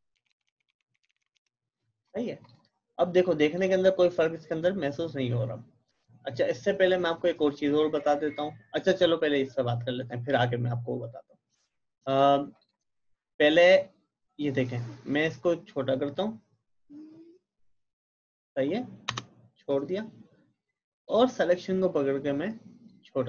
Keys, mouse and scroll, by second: 0.0-1.6 typing, 2.4 click, 12.1 click, 15.0-20.8 drag, 21.1-23.2 drag.